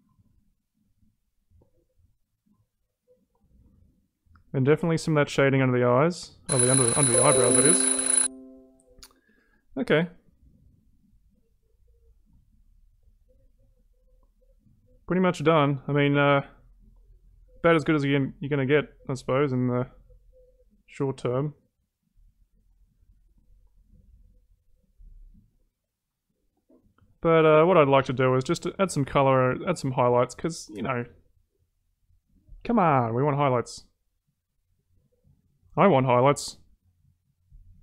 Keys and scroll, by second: 16.5 ctrl+z.